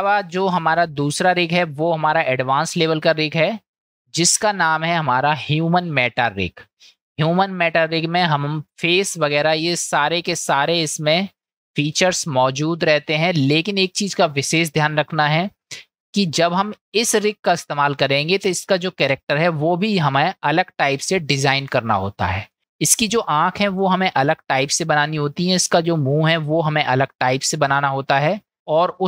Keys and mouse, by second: 0.8-1.2 shift+middle drag, 1.5-1.9 middle drag, 3.8 shift+a, 10.5 click, 12.3-12.8 shift+middle drag, 14.2-15.3 middle drag, 15.6 click, 25.1-25.6 middle drag, 26.3 click, 27.8-28.2 middle drag.